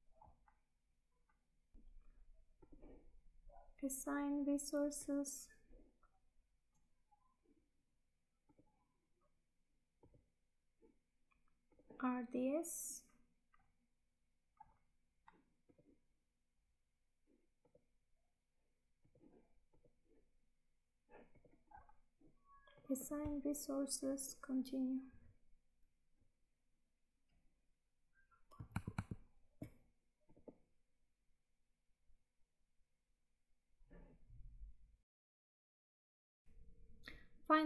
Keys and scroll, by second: 28.8 alt+Tab.